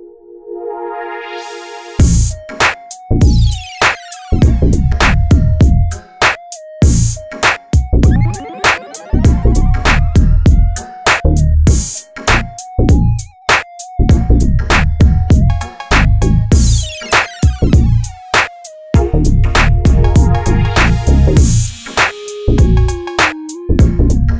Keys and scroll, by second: 2.0 ctrl+c, 2.3 ctrl+v, 4.1 ctrl+c, 4.3 ctrl+shift+v, 10.1 Delete, 11.1 Delete, 12.4 Delete, 13.5 Delete, 14.1 Delete, 14.7 Delete, 15.1 ctrl+z, 16.1 Delete, 16.8 Delete, 20.6 ctrl+a.